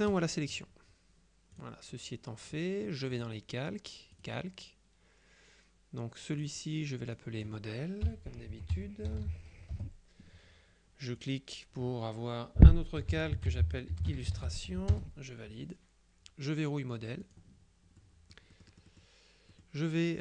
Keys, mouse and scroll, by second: 0.2 click, 1.6 click, 3.3 click, 4.2 click, 6.4 click, 7.2 click, 8.4-9.6 typing, 9.8 Return, 11.3 click, 12.9-14.9 typing, 17.3 click, 18.1-19.6 drag, 19.8 click.